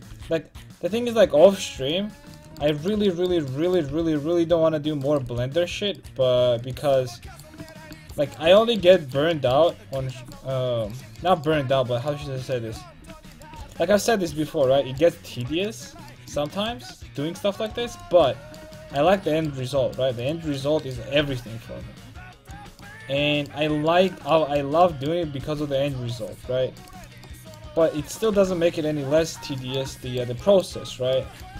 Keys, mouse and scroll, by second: 0.3 c, 1.8 x, 3.9 c, 5.2 click, 5.3 x, 6.4 x, 7.0 click, 11.0-15.9 right drag, 13.6 x, 17.9 x, 21.3 g, 22.7 a, 22.9 middle click, 23.3 middle click, 25.5 c, 27.0 x, 28.4 g, 29.4 a.